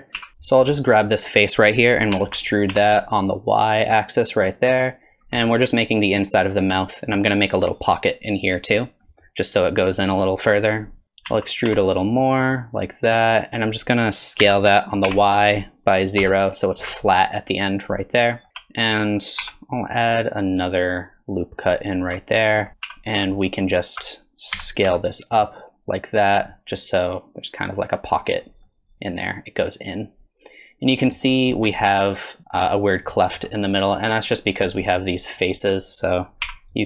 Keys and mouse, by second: 0.2 3, 0.3 alt+z, 1.0 click, 2.1 e, 5.4-7.1 middle drag, 9.0 middle click, 10.2 middle click, 11.3 e, 14.4 s, 19.4 ctrl+r, 22.9 3, 23.7 alt+click, 24.5 s, 28.7-31.1 middle drag, 31.6 middle click, 32.4 middle click, 33.1 middle click, 34.5 click, 34.8 middle click, 35.4 middle click, 36.4 3.